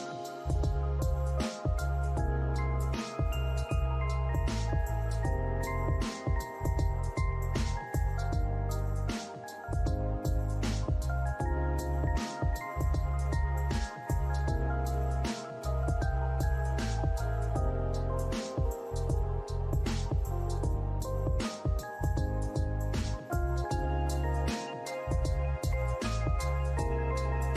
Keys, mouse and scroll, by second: 1.3 alt+click, 2.7 right click, 4.9 alt+click, 7.9 alt+click, 9.3 double click, 9.6 scroll down 1, 12.3 alt+click, 17.0 double click, 17.2 scroll down 1, 17.7 alt+click, 19.4-20.3 typing, 20.3 scroll down 1, 20.7 alt+click, 21.4 alt+scroll down 1, 21.7 alt+middle click, 22.1 alt+click, 22.4 alt+middle click, 23.7 double click, 26.4 scroll up 1.